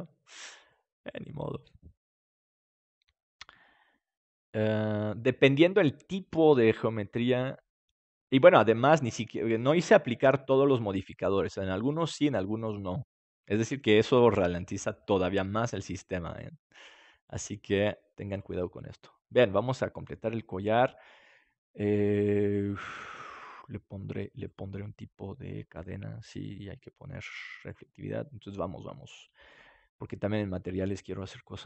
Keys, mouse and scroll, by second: 4.8-6.2 right drag, 9.5-11.9 middle drag, 13.6-15.4 drag, 18.2-21.3 drag, 24.0-27.3 right drag, 25.7-27.7 drag, 29.4-31.5 drag.